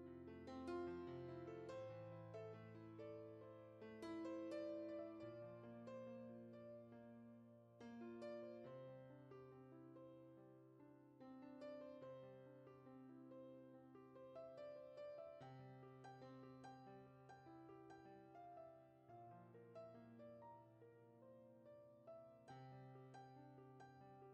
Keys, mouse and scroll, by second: 0.4 click, 1.5 scroll up 2, 1.7 click, 2.0 middle click, 2.5 ctrl+z, 2.6 KP_Decimal, 2.8-3.2 scroll up 1, 3.2-4.2 drag, 4.4 middle click, 5.3 click, 5.6 scroll down 6, 6.1 scroll up 2, 6.3 scroll down 1, 6.4 click, 7.0-8.0 middle drag, 8.3 ctrl+z, 8.4 ctrl+z, 8.7 ctrl+z, 9.7-10.7 drag, 11.0 click, 11.4 middle click, 11.8 scroll up 2, 11.9 click, 12.7 middle click, 12.9 scroll up 3, 13.0 click, 13.5 scroll down 5, 13.7 middle click, 14.0 click, 14.6 scroll down 3, 14.7 middle click, 15.2 click, 15.6 click, 16.0 scroll up 2, 16.1 middle click, 17.0 scroll up 1, 17.4-18.4 drag, 18.4 scroll up 3, 18.5 click, 19.3 scroll down 1, 19.6 shift+middle click, 19.8 scroll up 1, 19.9 shift+middle click, 20.6 click, 21.2 scroll down 4, 21.3 middle click, 21.9-22.6 scroll up 5, 22.6 click, 23.3 scroll down 3, 23.6 middle click.